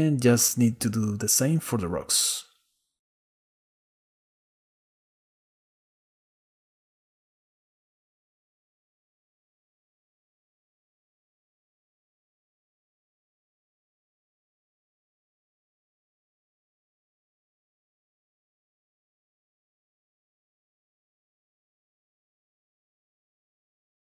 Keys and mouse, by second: 1.1 shift+d, 3.8-5.1 drag, 7.4-9.1 drag, 10.3 click, 10.5-12.0 drag, 13.2-15.3 drag, 16.6 click, 18.0 click, 18.9 click, 19.3 click, 19.8 shift+click, 20.9-22.5 shift+drag, 23.0 click.